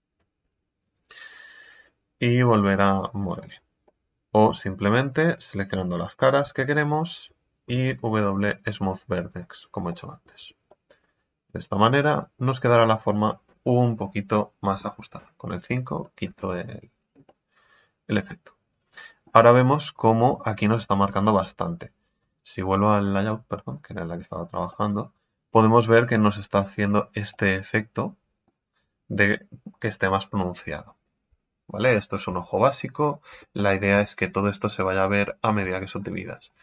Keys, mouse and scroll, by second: 3.2-3.7 scroll up 10, 3.8-10.4 middle drag, 10.4 Tab, 11.7-19.7 middle drag, 19.7 scroll up 6, 23.0 click, 23.5 scroll down 5, 23.9 scroll up 3, 24.7-32.1 middle drag, 32.1 scroll down 3, 32.5-32.9 scroll up 1, 32.9 scroll down 2, 33.2 Tab, 33.5 middle click, 33.9 Tab, 34.3-35.6 middle drag, 35.6 Tab, 35.9-36.6 scroll up 9.